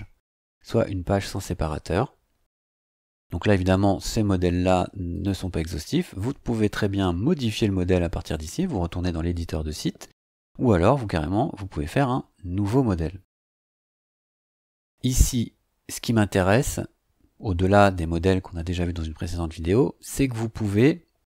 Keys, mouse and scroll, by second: 5.1 click, 20.6 click, 21.2-21.3 typing.